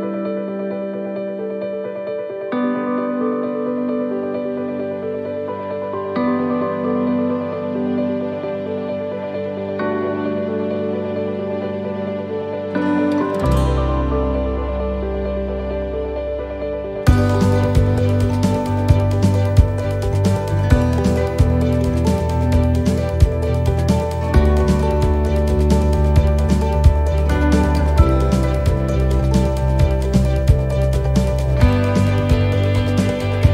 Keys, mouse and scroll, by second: 2.4 shift+d, 4.1 click, 4.8 shift+middle click, 5.9 click, 7.8-8.5 scroll down 2, 8.3 shift+middle click, 8.7 scroll up 1, 15.1 right click, 15.1 click, 16.0 click, 19.4 click, 23.1 click, 29.4 click, 33.2 click, 33.2 middle click.